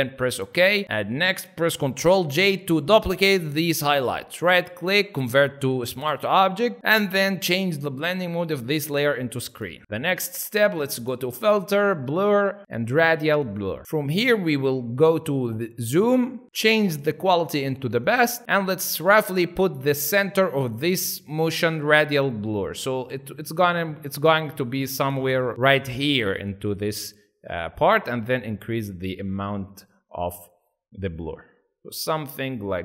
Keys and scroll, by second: 2.0 ctrl+j.